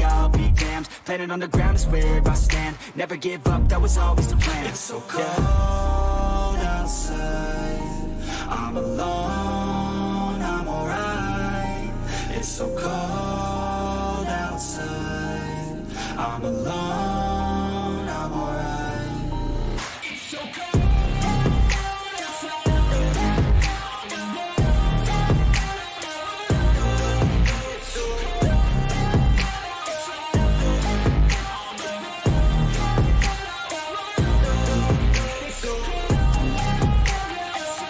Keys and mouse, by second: 0.7 click, 4.4 right click, 6.5 click, 9.7 shift+click, 12.8 ctrl+t, 16.3-30.3 drag, 30.3 ctrl+=, 33.6-37.8 drag.